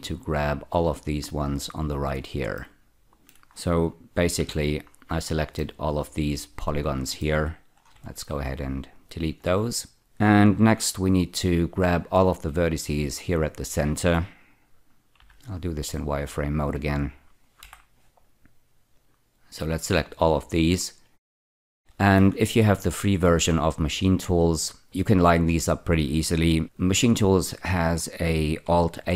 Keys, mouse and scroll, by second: 0.0-1.9 shift+drag, 2.5 middle click, 4.3 z, 5.0-5.5 scroll down 1, 5.5 middle click, 7.8 x, 8.9 click, 9.7 middle click, 10.6 1, 12.1 click, 13.4 shift+click, 15.1 z, 15.8 click, 17.6 F4, 18.9 click, 21.5 shift+middle click.